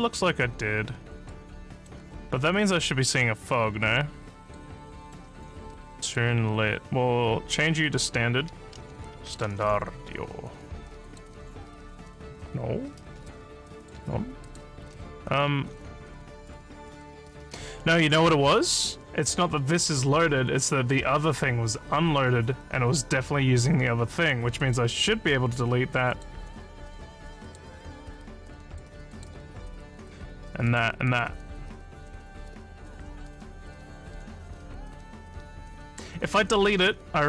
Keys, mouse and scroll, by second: 1.6 alt+middle click, 2.4-4.5 alt+drag, 4.9 alt+middle click, 6.0 click, 7.5 click, 8.1-10.1 typing, 11.0 click, 12.3 scroll up 3, 13.3 alt+click, 14.5 click, 24.6 click, 26.1 click, 27.4 click, 28.7 click, 29.1 click, 30.7 click, 31.1 click.